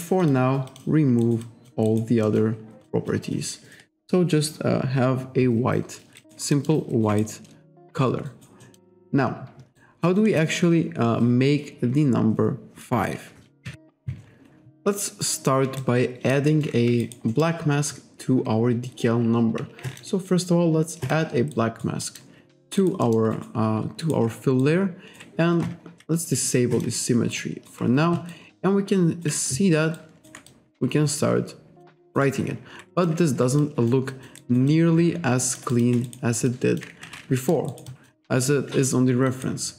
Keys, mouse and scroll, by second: 0.3 click, 0.7 click, 1.3 alt+right click, 1.5 alt+click, 1.9 alt+right click, 2.3 alt+middle click, 2.9 alt+click, 6.2 alt+right click, 6.6 alt+middle click, 7.1 alt+right click, 8.3 alt+right click, 8.7 alt+middle click, 9.8 alt+right click, 10.3 alt+middle click, 13.7 KP_5, 15.9 alt+right click, 16.6 alt+middle click, 17.1 alt+right click, 17.4 alt+middle click, 19.9 click, 21.1 click, 21.6 alt+right click, 22.1 alt+middle click, 22.9 alt+right click, 23.1 alt+middle click, 23.4 alt+right click, 24.1 alt+right click, 24.7 ctrl+right click, 26.8 click, 27.4 alt+right click, 28.4 ctrl+right click, 30.0 ctrl+right click, 30.5 click, 32.1 alt+right click, 32.3 alt+click, 33.7 alt+click, 34.2 alt+click, 35.8 alt+shift+click, 36.1 alt+right click, 36.5 alt+click, 37.1 ctrl+z, 37.4 alt+middle click, 37.8 alt+right click, 37.9 alt+click, 39.3 alt+right click.